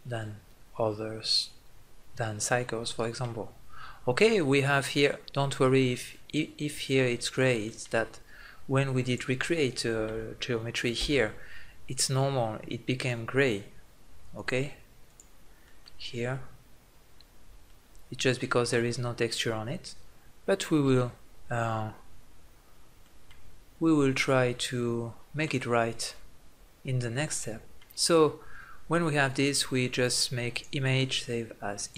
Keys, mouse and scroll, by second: 3.4-7.1 middle drag, 7.4-8.8 middle drag, 8.8-10.8 drag, 10.8 Tab, 14.9 click, 15.4-16.5 middle drag, 17.3 scroll down 1, 17.5-19.3 middle drag, 21.6-24.7 middle drag, 28.5-30.3 middle drag, 30.3-31.7 drag.